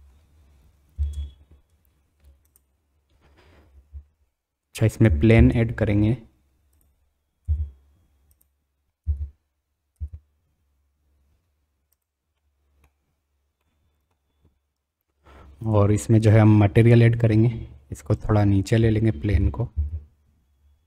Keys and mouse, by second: 0.4 middle click, 1.2 space, 2.5-4.0 drag, 5.3 shift+a, 7.4 s, 9.0 g, 12.4 middle drag, 12.6 click, 13.6 middle click, 18.2 click, 19.3 g.